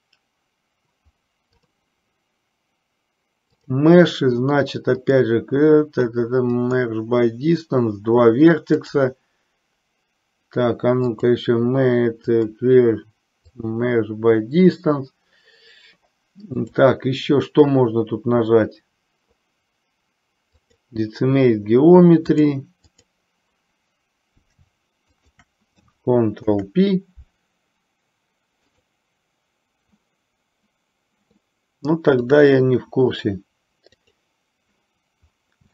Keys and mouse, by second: 3.8-7.2 drag, 8.9-10.7 drag, 11.2-13.9 drag, 16.7-20.9 drag, 22.3-23.3 drag, 25.3 shift+click, 26.6 ctrl+p, 34.1 click.